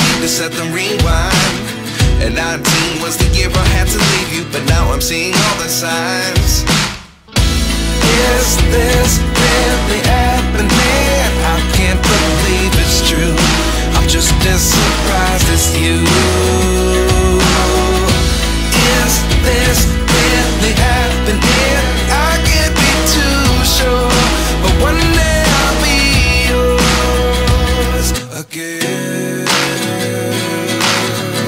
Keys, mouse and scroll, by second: 13.3 double click.